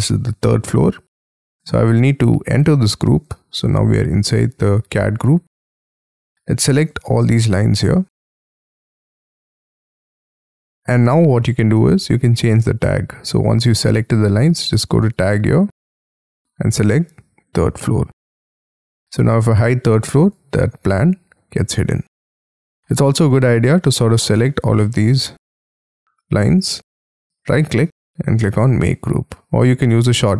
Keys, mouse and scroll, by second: 2.7 double click, 3.6-4.6 scroll down 15, 4.6 middle click, 5.5-6.7 scroll up 10, 9.0 middle click, 9.9 scroll down 7, 10.3 scroll up 7, 10.7-11.1 scroll down 7, 11.1-11.5 scroll up 5, 11.5 scroll down 4, 22.6 middle click, 23.8 middle click, 24.8 middle click, 27.1-27.7 scroll up 3, 27.7 right click.